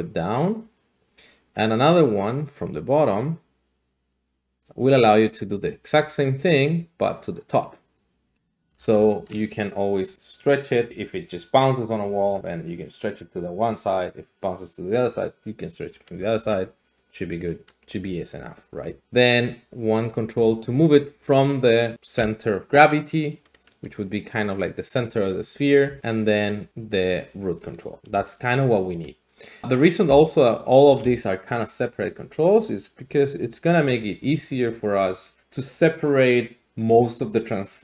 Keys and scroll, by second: 12.1 d, 19.0 ctrl+z, 19.0-21.9 d, 24.0 d, 25.8-28.0 typing, 30.1 d, 30.6 d, 30.6 d, 30.9 d.